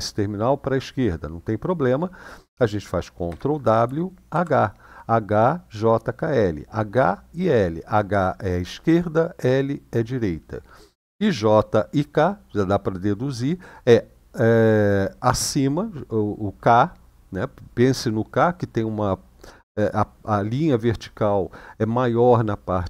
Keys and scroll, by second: 3.1 ctrl+w, 4.1 shift+h.